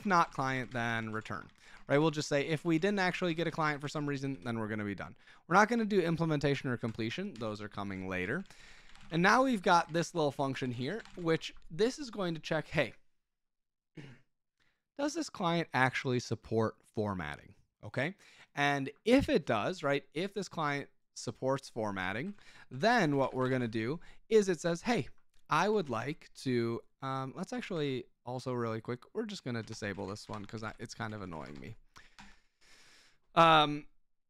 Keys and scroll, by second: 0.0-11.6 typing, 7.3 Escape, 21.9 Escape, 22.1-24.0 typing, 25.8 ctrl+w, 26.5-28.2 typing, 29.3-32.1 typing.